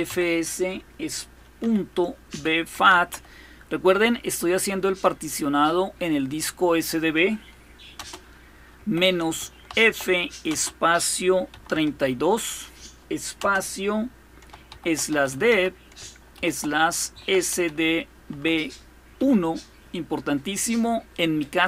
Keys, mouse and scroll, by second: 0.0-0.3 typing, 1.4-3.4 typing, 7.7-10.3 typing, 11.3 typing, 13.2 typing, 14.5-19.0 typing.